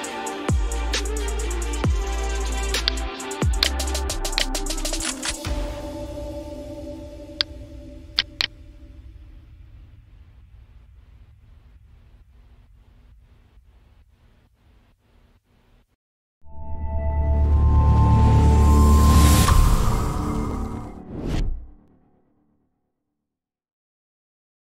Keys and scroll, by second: 0.4 ctrl+-, 7.6 space, 8.7-14.2 typing.